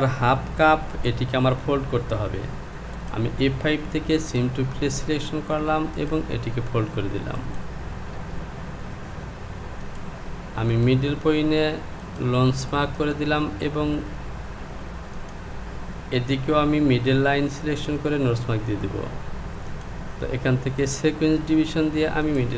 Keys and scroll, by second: 0.9 Home.